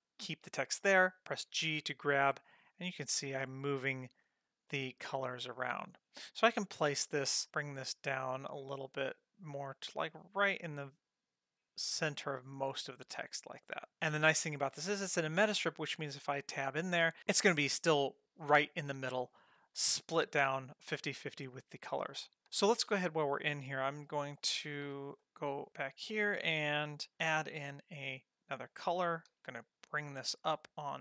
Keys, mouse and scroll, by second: 1.4 g, 7.5 g, 14.0 click, 15.7 click, 16.5 Tab, 20.4-22.4 scroll down 1, 22.4 ctrl+z, 24.8 Page_Down, 27.3 shift+a, 29.3 g.